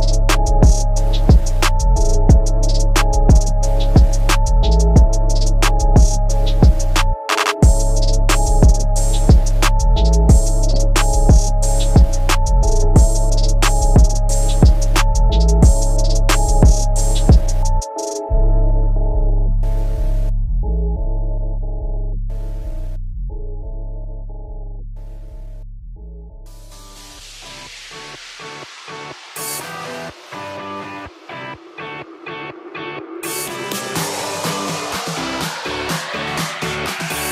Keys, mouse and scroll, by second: 3.5 middle click, 4.3 middle click, 4.7 shift+space, 5.6 Escape, 6.2 scroll down 1, 7.0 click, 9.4 g, 10.4 z, 16.0 click, 16.8 ctrl+c, 17.4 Down, 17.8 ctrl+v, 19.4 Up, 20.2 Up, 21.6 ctrl+s, 22.4 scroll down 2, 22.7 middle click, 23.2 scroll down 2, 23.4 shift+middle click, 24.0 shift+Left, 24.5 shift+space, 27.6 Escape, 28.0 middle click, 28.2 shift+middle click, 28.3 shift+space, 31.5 Escape, 32.9 click, 33.6 click, 35.4 click, 35.5 click, 35.9 ctrl+z.